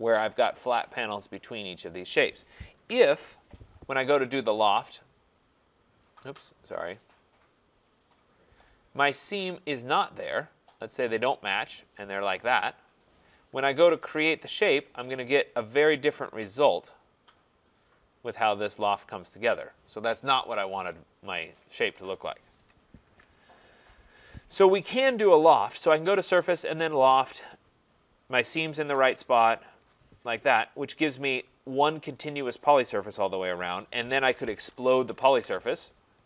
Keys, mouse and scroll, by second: 2.7 click, 2.8 ctrl+z, 4.4 right click, 7.1 click, 8.0 click, 9.7 click, 11.3 click, 14.0 Return, 15.8 click, 16.4 scroll, 21.7 right click, 23.1 ctrl+z, 23.7 middle click, 23.8 scroll, 24.5 right click, 26.1 click, 26.9 click, 28.9 Return, 29.8 Return, 30.9 click, 34.1-35.4 typing.